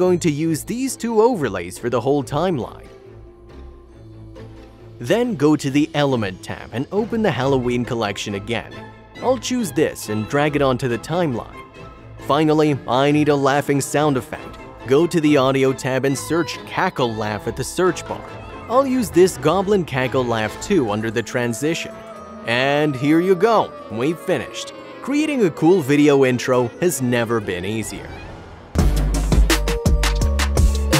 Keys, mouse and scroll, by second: 0.1 click, 0.6 double click, 1.6 click, 2.4 click, 2.4 double click, 3.4 click, 4.1 click, 10.1 click, 21.1 click, 23.7 click, 27.6 Home, 28.0 click, 28.2 Home.